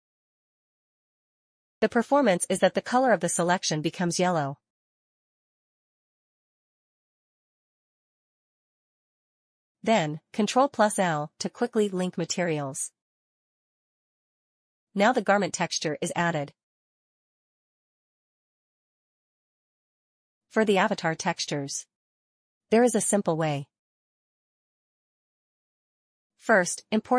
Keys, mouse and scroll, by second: 9.5 ctrl+i, 11.4 click, 13.0 scroll down 1, 14.3 middle click, 14.9 middle click, 15.0-16.1 scroll down 1, 16.3 middle click, 17.8 middle click, 18.8 click, 21.0 scroll down 1, 21.6 middle click, 21.9 middle click, 24.2 click.